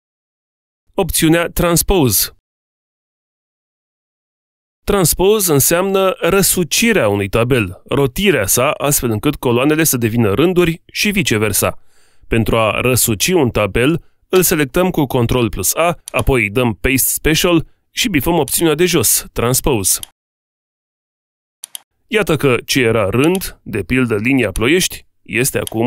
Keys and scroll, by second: 14.6 ctrl+a.